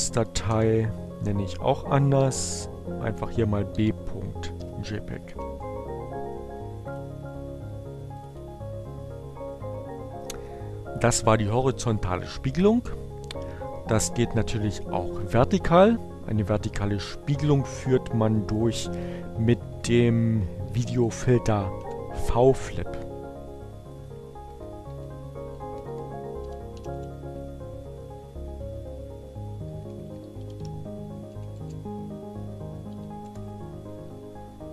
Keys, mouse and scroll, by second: 0.5 BackSpace, 2.7-3.7 typing, 5.3-6.3 typing, 8.0 click, 8.9-10.0 drag, 13.2-14.3 drag, 15.0 click, 18.2 Up, 18.6 Left, 20.8 Delete, 21.4 v, 21.7 BackSpace, 23.6 Delete, 24.2-26.5 typing, 24.6 Right, 24.7 Delete, 28.4 Left, 28.9-31.0 typing, 31.1 Return, 34.1 click.